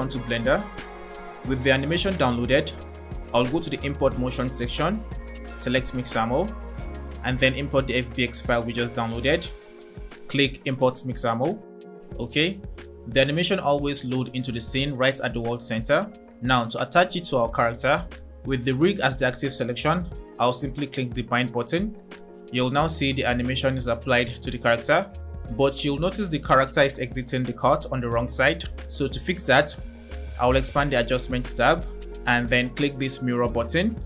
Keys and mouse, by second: 4.7-6.3 drag, 16.1 click, 16.1 middle click, 16.1 right click, 17.2 click, 17.2 middle click, 17.2 right click, 20.7 click, 22.4 space, 30.8 click, 33.0 click.